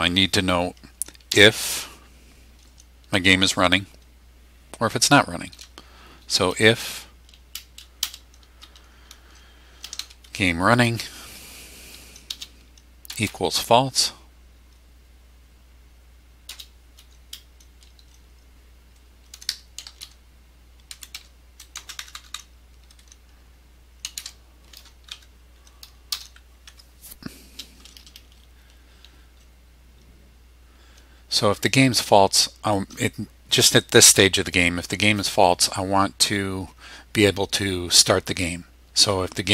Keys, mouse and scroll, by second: 1.0-1.9 typing, 8.0 space, 9.6-10.7 typing, 11.3 Tab, 12.3 space, 13.1 =, 16.5 space, 19.1-21.8 typing, 23.8-25.1 typing, 26.1 Return, 26.7 Tab.